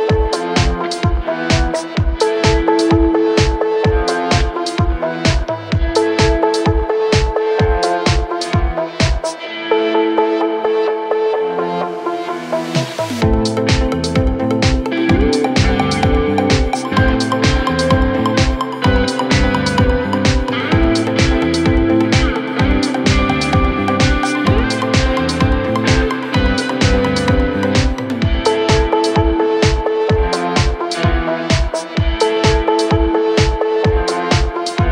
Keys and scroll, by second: 2.9 4, 3.4 3, 5.1 ctrl+z, 5.8 7, 8.0 4, 8.8 3, 10.4 ctrl+z, 11.4 ,, 12.5 ctrl+z, 13.7 ctrl+z, 18.3 l, 20.4 l, 22.3 k, 23.1 8, 23.3 Return, 24.5 l, 24.8 BackSpace, 25.0 k, 25.8 1, 25.9 Return, 28.1 ctrl+z, 29.2 4.